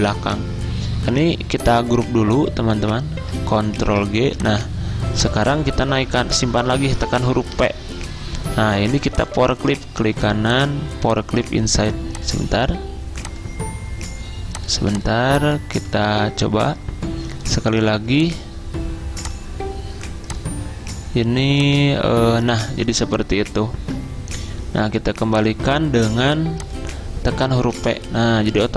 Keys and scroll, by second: 3.8 ctrl+g, 7.1 p, 15.9 ctrl+z, 27.9 p.